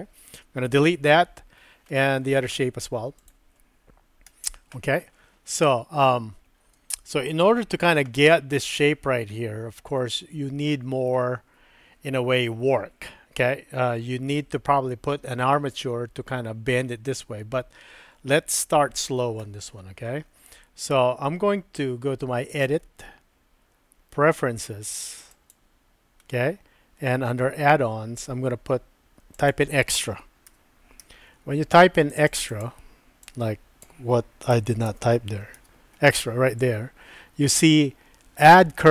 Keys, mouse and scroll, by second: 0.3 Delete, 1.9 middle click, 4.3 Delete, 7.5 shift+click, 10.0-11.1 middle drag, 22.6-25.8 drag.